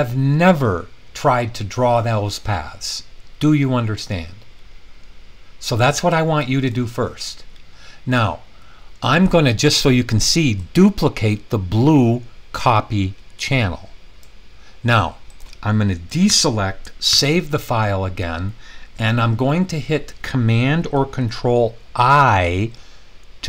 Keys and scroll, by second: 16.3 super+d, 17.1 super+s.